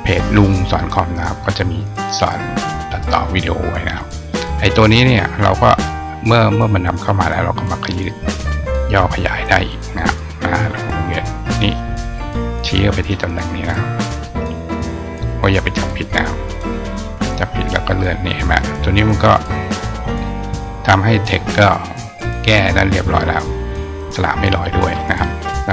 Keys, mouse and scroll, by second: 2.8-3.8 drag, 4.2 click, 4.9 click, 5.6 click, 7.6-11.6 drag, 12.2 click, 14.1 click, 16.3 click, 17.3 click, 17.9-19.1 drag, 20.5-23.0 drag.